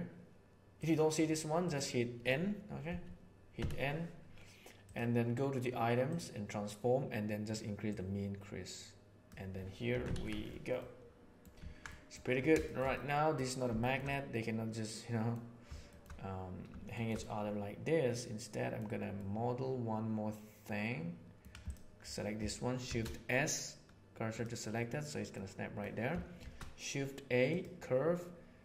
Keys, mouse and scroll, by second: 0.7 right click, 1.6 right click, 2.8 n, 3.5 n, 6.0 right click, 7.9-9.2 right drag, 9.8 Tab, 10.0 alt+a, 10.8-11.3 middle drag, 11.9 middle click, 12.6 shift+middle click, 12.9-13.3 middle drag, 13.7 shift+middle click, 14.0-15.3 middle drag, 15.8 shift+middle click, 16.8 shift+middle click, 17.2-18.7 middle drag, 19.1-21.3 middle drag, 22.7 shift+s, 25.2 middle click, 26.3 shift+a.